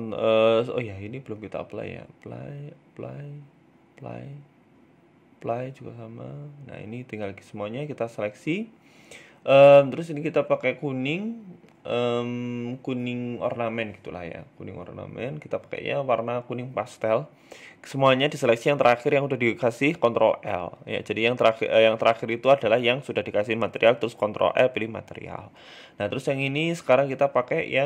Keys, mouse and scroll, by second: 1.7 right click, 2.3 click, 2.9 right click, 3.3 click, 4.0 right click, 4.6 ctrl+z, 4.8 ctrl+z, 5.2 ctrl+z, 5.6 middle click, 5.9 ctrl+z, 6.2 middle click, 7.0 click, 7.7 click, 8.2 click, 14.0 click, 16.5 right click, 16.8 shift+right click, 18.5 ctrl+l, 20.0 middle click, 20.3 right click, 21.1 click, 25.3 click, 26.0 click.